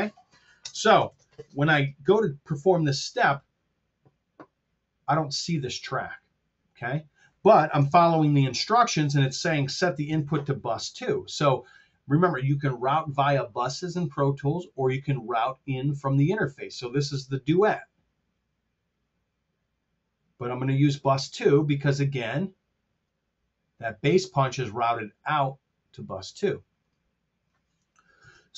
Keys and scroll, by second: 0.6 space, 1.1 super+z, 7.8 super+Tab, 10.0 super+Tab, 28.2 super+Tab.